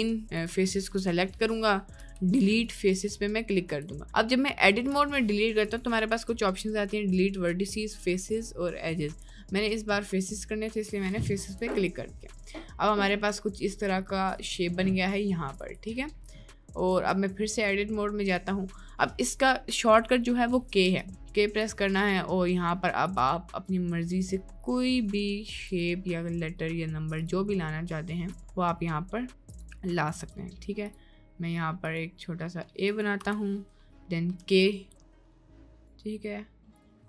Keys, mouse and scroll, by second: 0.4 shift+click, 1.2 middle click, 2.2 Delete, 3.0 Tab, 3.7 Tab, 4.0 middle click, 6.1 Delete, 10.2 middle click, 11.1 middle click, 11.7 Tab, 11.9 click, 12.0-12.4 middle drag, 12.7-13.3 middle drag, 13.6 middle drag, 16.1 shift+middle click, 16.9 Tab, 17.9 middle click, 21.0 k, 34.4 k.